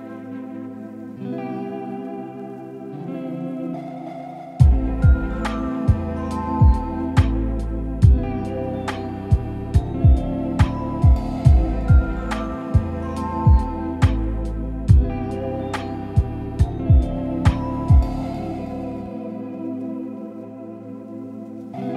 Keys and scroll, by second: 1.4 ctrl+z.